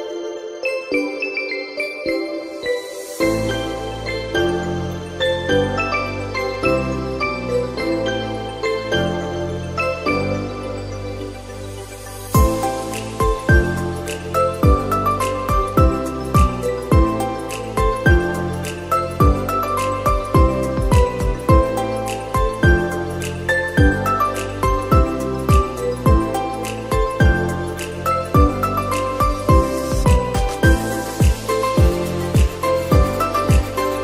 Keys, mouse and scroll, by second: 0.6-1.4 middle drag, 1.4-3.1 right drag, 3.1 click, 3.4 scroll down 4, 3.6-7.1 middle drag, 7.1-7.7 scroll up 1, 7.7-9.1 middle drag, 9.1-10.2 scroll up 2, 10.2-11.9 middle drag, 11.9 click, 13.2-14.1 shift+middle drag, 14.1 click, 14.4-17.0 middle drag, 17.0-17.6 scroll up 2, 17.6 middle click, 18.5 shift+a, 21.1-21.6 scroll down 4, 21.6-22.7 middle drag, 22.7 g, 25.0 middle click, 25.7 Tab, 27.4 f, 28.3 s, 31.4 middle click, 31.8 z, 33.5 g.